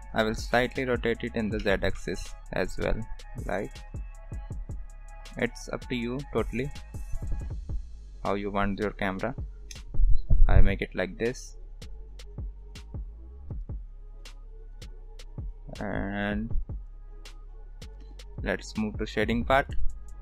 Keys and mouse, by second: 1.6 r, 9.5 ctrl+s, 10.4-18.1 drag, 18.2 ctrl+s.